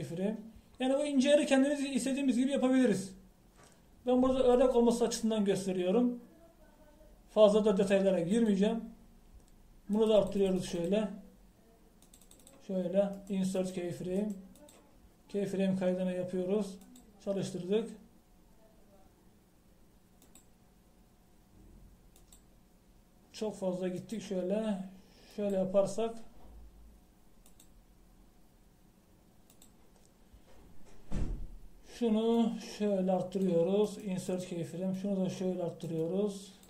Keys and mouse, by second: 1.0-7.3 drag, 9.5-14.2 drag, 14.2-17.9 middle drag, 17.9-19.7 drag, 21.4-23.2 drag, 23.4-28.2 drag, 28.5-30.0 drag, 34.9 middle click, 36.0-36.6 middle drag.